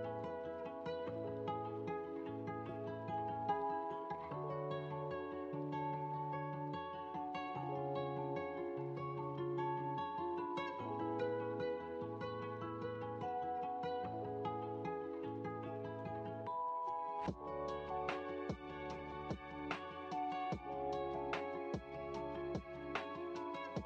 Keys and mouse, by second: 1.9-3.8 drag, 5.6-11.7 drag, 12.4-18.6 middle drag.